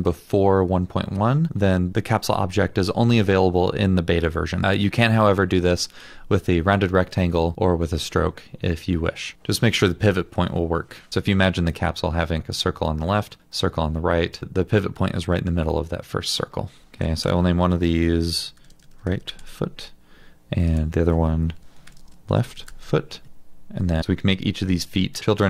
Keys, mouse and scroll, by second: 16.8 ctrl+d, 17.2 Return, 18.3-19.8 typing, 21.6 Return, 21.9-23.1 typing.